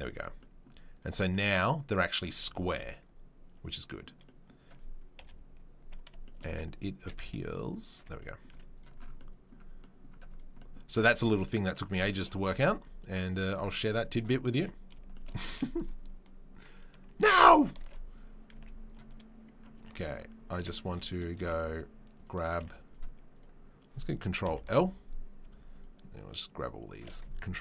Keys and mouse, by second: 0.1 Tab, 3.7-5.1 right drag, 5.1 click, 5.1 KP_7, 6.1 shift+right drag, 6.3-7.9 drag, 7.0 s, 7.9-10.3 middle drag, 8.5 z, 10.3 drag, 10.4-14.1 middle drag, 13.2 Tab, 14.1 right click, 14.2-20.0 middle drag, 15.4 z, 18.2 ctrl+s, 18.5 z, 19.8 Tab, 20.0 click, 20.1-23.3 middle drag, 20.5 Tab, 20.8 3, 21.4 z, 22.5 z, 23.3 click, 23.5-25.7 middle drag, 24.4 ctrl+l, 25.7 shift+right click, 25.8-26.8 shift+middle drag, 26.8 shift+right click, 26.9-27.6 shift+middle drag.